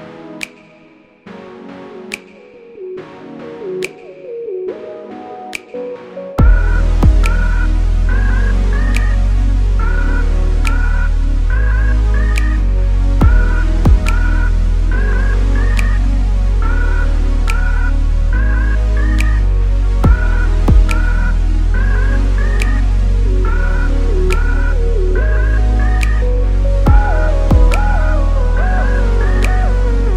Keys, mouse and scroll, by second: 0.1-0.5 scroll up 1, 0.5 scroll down 1, 0.7-1.1 scroll up 1, 1.1 click, 1.4 click, 1.6 click, 2.2 Tab, 2.7 click, 2.9 scroll down 2, 3.1 click, 3.4 middle click, 3.9 click, 4.3-9.2 middle drag, 4.6 Tab, 7.4 KP_7, 8.2 scroll up 1, 8.4 s, 9.2 click, 9.3 s, 10.2 click, 10.3 middle click, 10.6 Tab, 10.8 scroll down 1, 11.2 click, 11.4 z, 12.3 shift+middle click, 12.6 click, 12.7 middle click, 13.2 scroll down 1, 13.4 click, 13.7 Tab, 13.9 scroll up 1, 14.1 3, 14.3 alt+click, 14.5 alt+click, 15.1 click, 15.4 click, 16.8 Tab, 17.0 scroll down 1, 17.2-18.3 middle drag, 17.7 KP_0, 18.3 click, 18.8 click, 19.1 ctrl+s, 20.6 scroll up 2, 20.8-22.3 middle drag, 22.3 click, 23.3 click, 24.0 scroll down 2, 24.2-27.6 middle drag, 24.7-25.0 scroll down 2, 25.0 ctrl+s, 26.9 s, 27.6 click, 27.9 s, 28.2 click, 28.5 shift+a, 29.3 scroll down 2, 29.4 s.